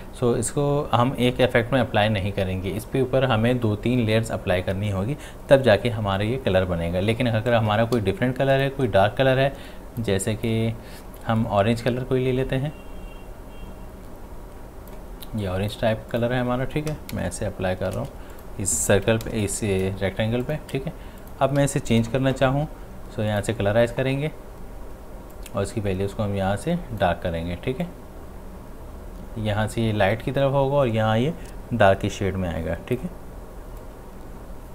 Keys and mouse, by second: 7.9 x, 8.5-15.4 drag, 18.0 ctrl+z, 18.3 click, 20.2 space, 20.4 ctrl+click, 21.9 ctrl+u, 23.3-34.7 drag.